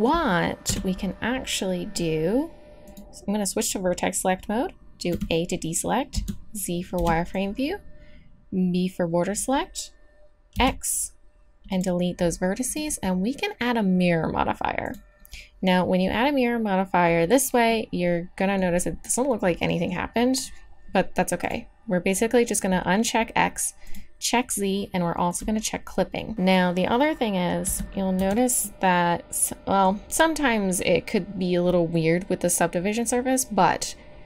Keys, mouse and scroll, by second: 0.6 KP_1, 2.8-5.1 drag, 5.1 a, 6.1 z, 7.0 b, 10.5 x, 12.6-14.8 drag, 17.7 click, 21.4-26.3 drag, 26.3-28.2 middle drag, 27.6 z, 28.2 Tab.